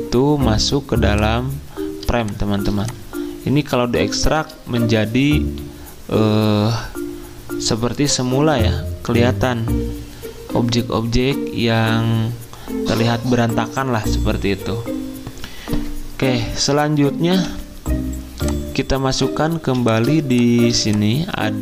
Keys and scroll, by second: 2.4 z, 17.3 v, 19.6 z.